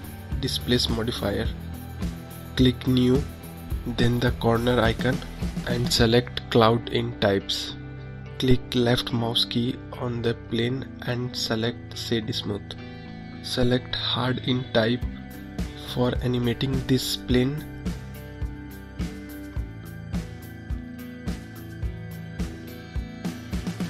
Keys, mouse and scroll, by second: 0.9-3.9 drag, 4.1-8.9 drag, 8.9-11.6 right drag, 11.6-14.9 drag, 14.9-15.4 scroll up 1, 15.4-15.8 scroll down 1, 15.8-18.9 middle drag, 21.1 click, 23.0-23.8 middle drag.